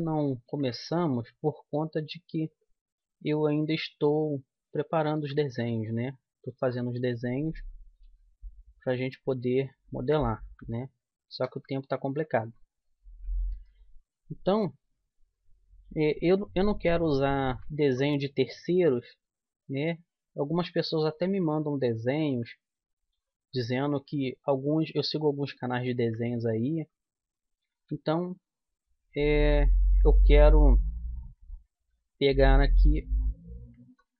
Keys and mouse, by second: 0.0-1.5 middle drag, 3.3 g, 8.0 g, 11.9-13.5 right drag, 13.5 e, 17.3 right click, 18.2 right click, 19.2 g, 22.6 middle click, 22.8 middle click, 23.0 middle click, 27.5 right click, 27.7 e, 31.7 g, 33.6-34.1 drag.